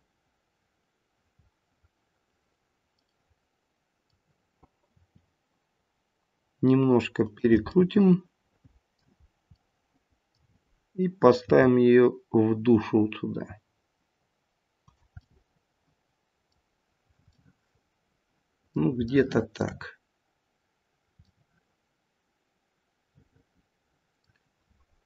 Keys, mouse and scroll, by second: 2.7 middle click, 3.1 middle click, 4.9 r, 7.7 middle click, 8.2 middle click, 9.2-9.6 scroll down 1, 9.6 middle click, 10.0 middle click, 12.2 g, 15.2 middle click, 16.7-17.3 scroll down 1, 17.3 middle click, 17.3 scroll down 1, 19.1 shift+middle click, 20.7-21.3 scroll down 1, 21.3 middle click, 21.3-22.1 scroll down 1.